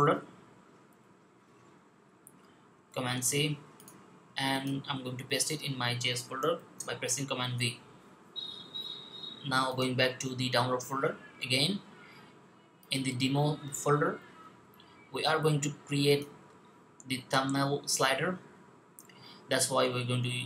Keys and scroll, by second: 2.7 super+c, 6.5 super+v.